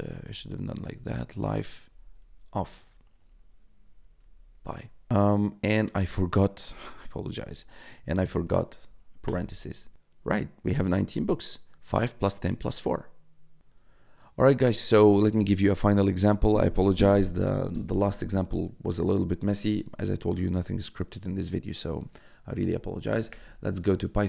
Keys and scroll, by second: 0.3-4.3 typing, 5.8 ctrl+x, 6.6 BackSpace, 7.0 ctrl+c, 8.1 Up, 8.6 shift+0, 9.2 Return, 13.6 BackSpace, 21.9 p, 22.6 h, 23.3 Return.